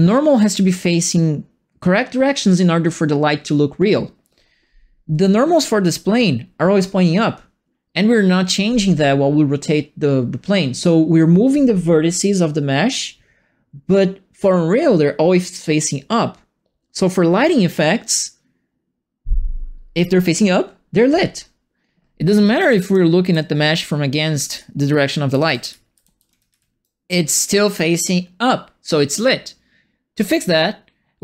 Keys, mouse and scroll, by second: 22.4-27.0 typing, 22.6-26.8 right drag.